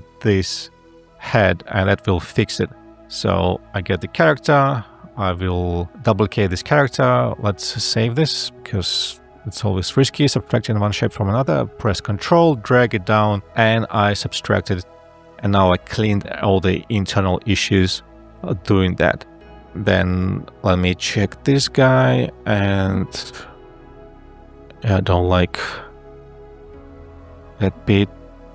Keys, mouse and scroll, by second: 22.0 ctrl+a, 23.1 e.